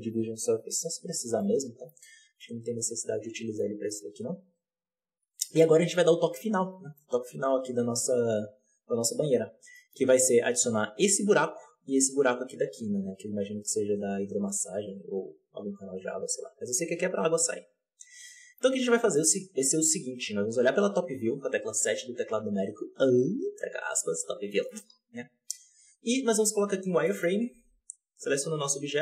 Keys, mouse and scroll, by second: 0.8-1.3 scroll down 2, 1.3-2.0 middle drag, 2.0-2.4 scroll down 2, 2.4-3.5 middle drag, 3.5-3.8 scroll up 1, 3.8-8.7 middle drag, 8.7 click, 9.1-9.7 scroll down 1, 9.7 shift+middle click, 9.9-12.7 scroll up 3, 12.7-17.6 scroll up 1, 17.6-18.2 scroll down 1, 18.2-19.3 shift+middle drag, 19.3-20.2 scroll up 1, 20.2 KP_7, 24.4 shift+middle drag, 24.6-26.5 scroll up 2, 26.5 z, 26.7 scroll down 2, 27.0 shift+middle click, 27.2-28.1 scroll up 1, 28.1 right click, 28.4 right click, 28.8-29.0 scroll down 5.